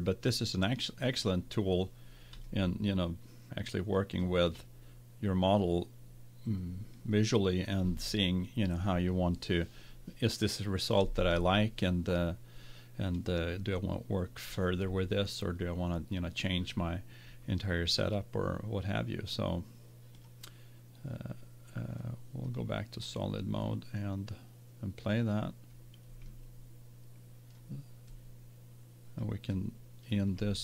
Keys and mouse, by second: 2.6-4.3 middle drag, 20.2-22.0 drag, 22.5 click, 25.0 click.